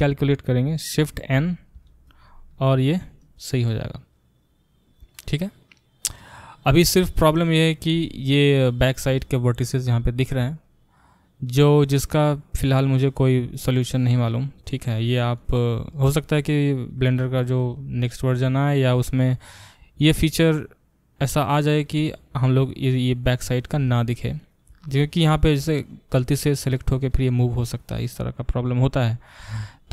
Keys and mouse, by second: 1.7 shift+n, 2.6-24.9 middle drag, 24.9 click, 25.0-26.4 middle drag, 26.4-29.0 drag, 29.0-29.9 middle drag.